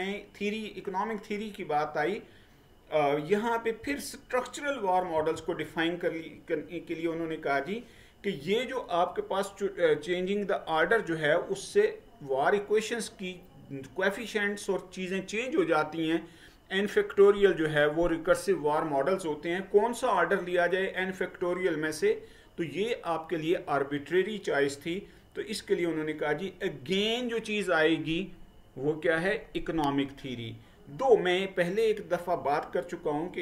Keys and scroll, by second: 5.3 Right.